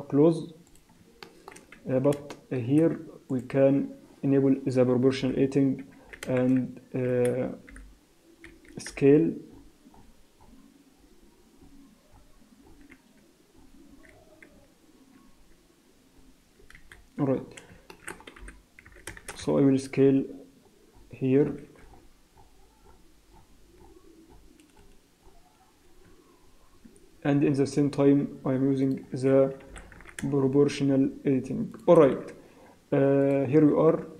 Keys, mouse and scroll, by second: 0.8 click, 1.3 shift+middle click, 1.6 scroll up 2, 2.0 Tab, 2.3 shift+middle click, 3.3 alt+click, 5.2 o, 6.1 s, 7.7 o, 8.5 Escape, 8.5-8.9 scroll up 1, 8.9 s, 14.1-14.8 scroll down 10, 15.2 s, 16.9-17.9 scroll up 9, 17.9 shift+middle click, 18.4 g, 18.9 s, 28.9 shift+click, 29.7 g, 32.1 s, 33.9-34.1 scroll down 4.